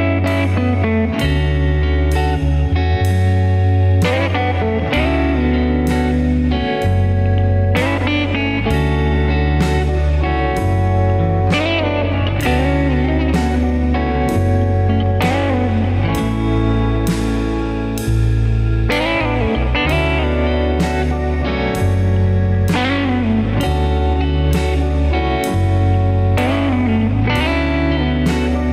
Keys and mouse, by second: 0.8-2.4 middle drag, 3.4 click, 4.3-6.2 middle drag, 7.1 ctrl+r, 14.9 ctrl+r, 19.1 middle click, 21.3 click, 22.1-23.3 middle drag, 27.3-27.8 shift+middle drag.